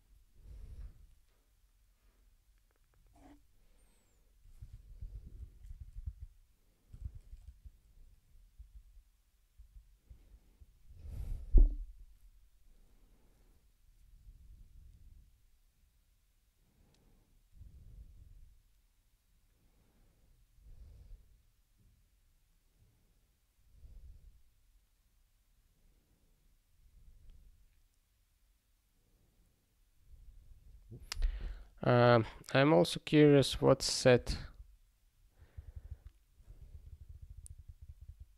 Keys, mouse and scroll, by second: 4.7 ctrl+n, 32.0 click, 33.3 ctrl+p, 33.7 ctrl+p, 35.5 ctrl+n, 35.7 ctrl+n, 36.5 ctrl+/, 36.7-38.0 ctrl+/.